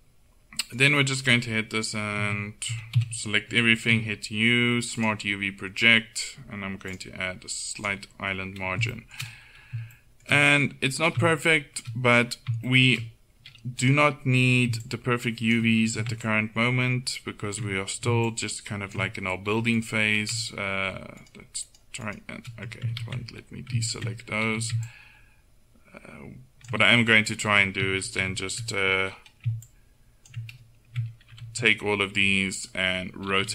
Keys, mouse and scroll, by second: 0.8-2.7 right drag, 2.2 Tab, 2.7 a, 3.0 a, 3.9 u, 9.0-12.9 middle drag, 13.9-14.9 right drag, 15.9 a, 23.1 ctrl+z, 24.5 a, 28.2 ctrl+l, 29.7-31.4 drag, 31.4 ctrl+l, 33.3 r.